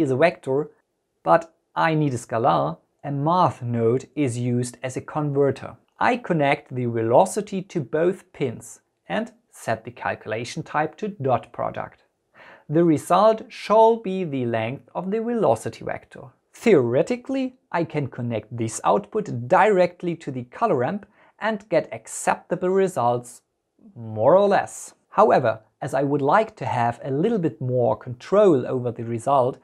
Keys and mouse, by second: 3.1 shift+a, 8.1-12.6 drag, 13.8 click, 15.8-17.0 drag, 18.1-19.2 drag, 21.6-23.0 drag.